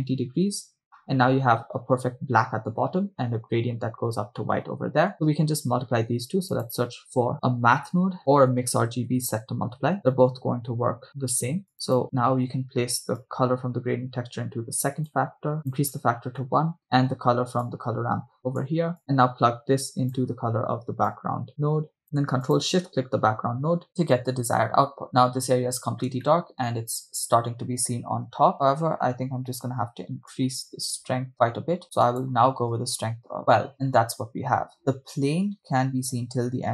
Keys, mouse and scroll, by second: 4.4 middle click, 6.2 shift+a, 8.7 BackSpace, 8.8 BackSpace, 11.7 click, 13.2-15.3 drag, 15.6 click, 16.6 middle click, 17.9-18.8 drag, 19.0-20.2 drag, 21.1-22.0 drag, 22.1 click, 25.1-25.6 scroll down 1, 26.3-27.0 shift+middle drag, 28.2-28.8 scroll up 4, 30.3-32.1 drag, 32.3-33.7 drag, 33.7 scroll down 3, 34.8 shift+middle click, 34.8 right click, 34.8 scroll up 4.